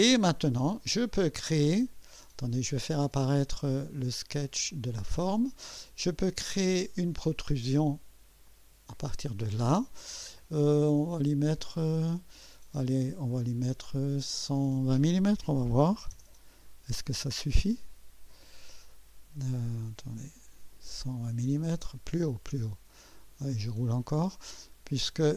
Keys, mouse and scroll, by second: 4.2 click, 4.9 space, 6.6 click, 8.4 click, 10.9-11.3 scroll down 1, 11.5-12.0 right drag, 13.6 click, 15.4-16.6 typing, 20.3 scroll down 1, 22.1 scroll up 1, 22.8-24.0 scroll up 3, 24.3 scroll up 1, 24.8-25.3 scroll up 3.